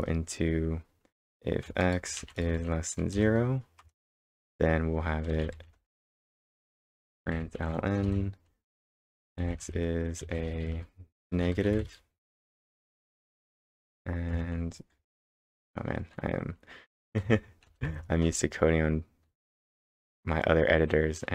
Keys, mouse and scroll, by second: 1.6 space, 2.2 shift+<, 2.5 space, 3.1 0, 3.8 Return, 5.1-12.3 typing, 13.4-14.2 typing, 15.0 End, 15.3 Return, 17.0-18.4 typing.